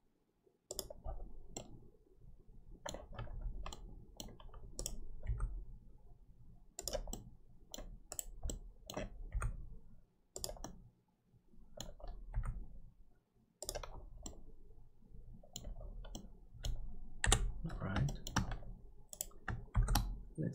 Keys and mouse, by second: 1.6-3.0 middle drag, 3.7 middle click, 5.4 g, 7.1 middle click, 8.4 middle click, 9.3 g, 10.6-11.7 middle drag, 14.3-15.5 middle drag, 16.1 middle click, 17.2 KP_7, 19.7 shift+d.